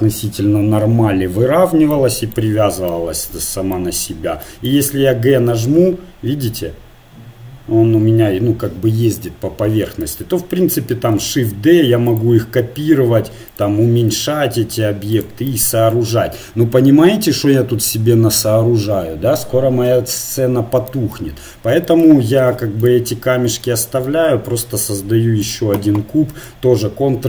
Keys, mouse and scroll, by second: 1.9-3.5 middle drag, 4.9 g, 11.1 shift+d, 12.7 s, 14.1 g, 15.5 middle click, 22.4 x, 24.1 shift+a.